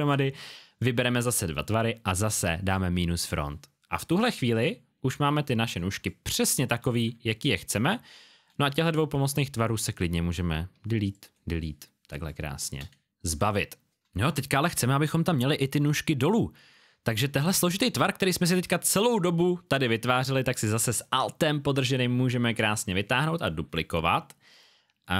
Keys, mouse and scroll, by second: 2.6 click, 5.4 alt+scroll down 1, 5.9 space, 6.0 click, 7.1 alt+scroll up 1, 9.7 click, 11.0 click, 12.1 space, 12.2 click, 13.0-14.1 alt+scroll down 1, 17.4 click, 21.9 alt+click.